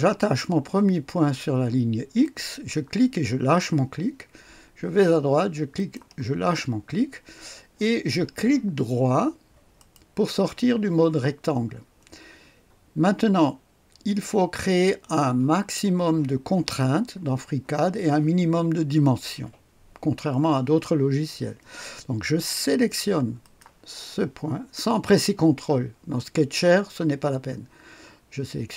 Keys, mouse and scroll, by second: 2.1 click, 5.7 click, 9.7 click, 23.3 click.